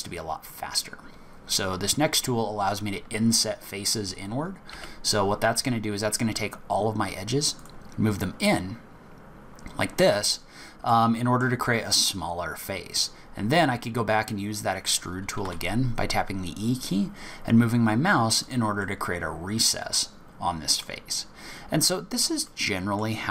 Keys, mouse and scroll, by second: 4.2-4.7 scroll up 3, 4.7 i, 10.9 middle click, 15.4 e, 18.8 middle click, 21.2 scroll down 5, 21.6-22.1 scroll up 5, 22.5 middle click.